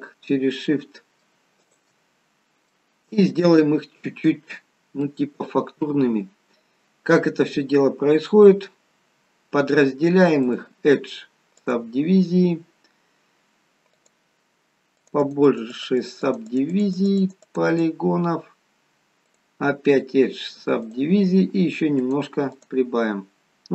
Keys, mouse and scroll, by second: 1.7 shift+click, 2.3-2.7 scroll up 2, 2.7 middle click, 3.7-4.7 scroll down 2, 4.7-5.0 scroll down 1, 5.0 middle click, 10.4 click, 14.1 click, 15.1 click, 15.5 click, 16.2 click, 16.4 click, 16.8 click, 17.0 click, 17.2 click, 17.5 click, 17.7 click, 22.0 click, 22.5 click, 23.5-23.7 scroll up 2.